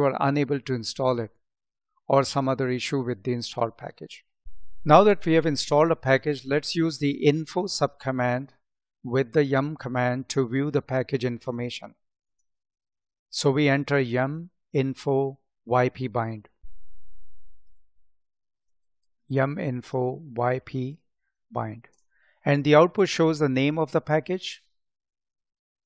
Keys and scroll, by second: 18.5 space, 19.5 space.